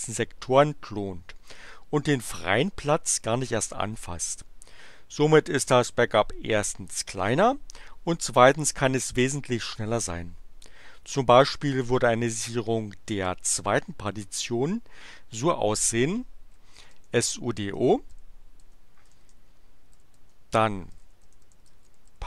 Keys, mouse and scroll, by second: 16.3-22.2 typing.